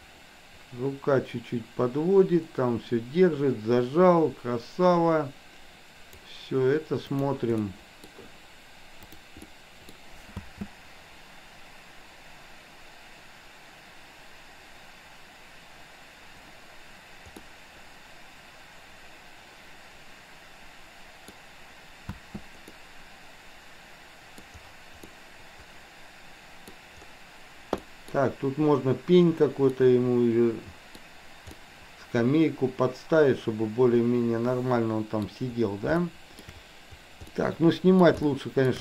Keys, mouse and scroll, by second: 7.1 click, 7.7 middle click, 9.5-10.0 middle drag, 10.5 space, 17.5-21.5 middle drag, 22.1 space, 22.7-24.5 middle drag, 25.1-26.7 middle drag, 27.7-28.1 middle drag, 29.7-31.0 middle drag, 31.6-35.2 middle drag, 36.1 shift+middle click, 37.2-38.0 middle drag, 38.2-38.7 shift+middle drag.